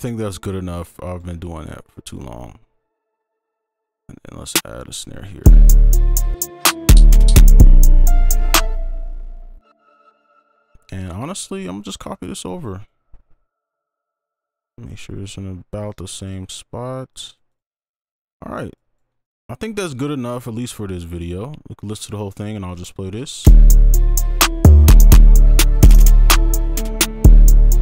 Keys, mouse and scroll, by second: 0.9 ctrl+click, 1.9 shift+click, 3.6 right click, 3.6 shift+l, 8.6 space, 9.4-11.2 scroll down 1, 11.4 ctrl+click, 12.9 shift+click, 17.5 double click, 17.8 right click, 23.5 space.